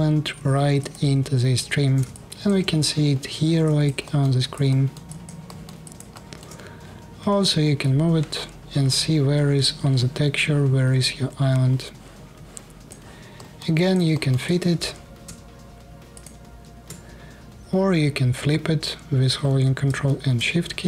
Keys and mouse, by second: 0.5-2.2 shift+drag, 3.1-6.3 alt+drag, 6.9 g, 7.5-8.9 right drag, 9.1-10.7 middle drag, 10.7 click, 11.2 right click, 12.2 right click, 13.3-14.3 alt+drag, 15.9 shift+middle click, 20.8 ctrl+shift+middle click.